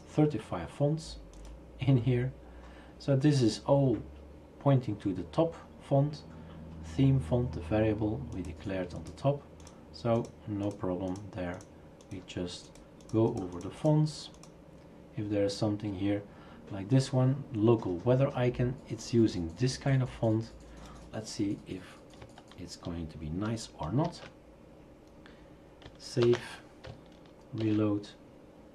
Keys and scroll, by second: 24.1 ctrl+v, 26.2 ctrl+s, 27.6 shift+super+r.